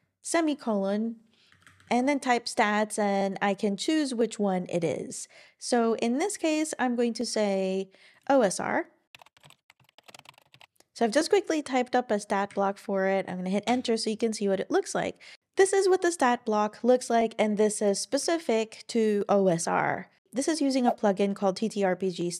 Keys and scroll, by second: 1.3-2.2 typing, 9.0-10.8 typing, 12.5 Down, 13.7 Return.